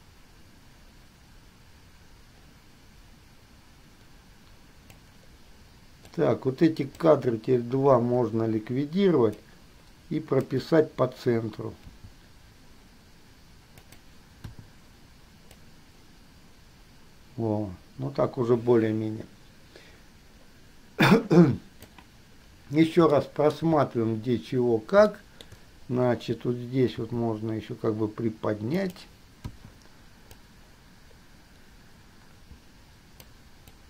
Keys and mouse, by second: 0.5-5.1 drag, 6.3 click, 6.5 click, 8.1 Delete, 9.5-10.8 drag, 12.0 g, 14.8 i, 15.8-16.4 drag, 17.5-18.0 drag, 25.5 shift+click, 27.1 g, 29.8 i, 30.5-33.5 drag.